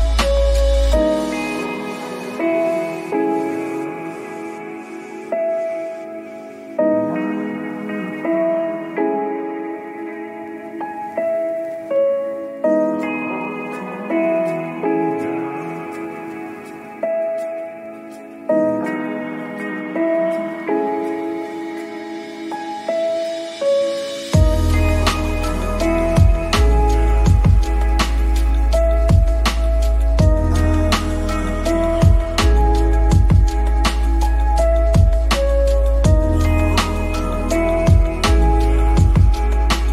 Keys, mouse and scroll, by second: 0.8 click, 1.0 middle drag, 1.8 middle click, 2.9 KP_Decimal, 3.3 click, 4.2 click, 5.0 shift+middle click, 5.3 middle click, 5.7 click, 6.7 middle click, 7.0 KP_0, 7.4 click, 13.7 middle click, 13.9 KP_7, 15.4 r, 16.6-17.4 drag, 18.7 click, 19.6 shift+middle click, 20.3 right click, 21.5 r, 22.5 g, 24.6-24.9 middle drag, 25.1 KP_0, 25.7 click, 26.5-27.9 drag, 29.8 middle click, 30.2 Delete, 31.8 click, 32.2 r, 33.3 click, 33.7 click, 34.0 shift+middle click, 34.4 KP_Decimal, 34.6 middle click, 35.0-36.0 drag, 36.1 middle click, 36.4 Delete, 37.8 shift+d, 38.1 click, 38.6 t, 38.9 t, 39.1 r.